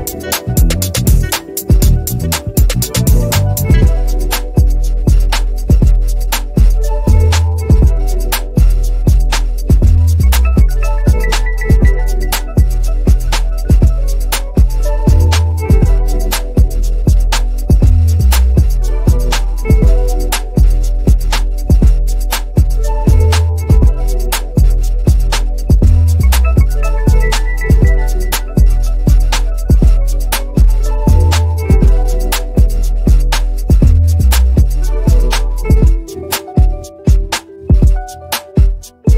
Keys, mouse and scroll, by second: 0.8 Delete, 1.2 b, 2.0 click, 2.9 p, 3.5 click, 8.7 click, 10.0 v, 10.6 click, 11.1 ctrl+c, 11.4 click, 11.8 ctrl+alt+v, 12.5 ctrl+scroll up 1, 12.9-18.9 drag, 18.9-19.3 ctrl+scroll up 2, 20.8-27.5 drag, 27.5 ctrl+scroll up 1, 28.8 click, 31.3 Right, 33.3-39.1 drag.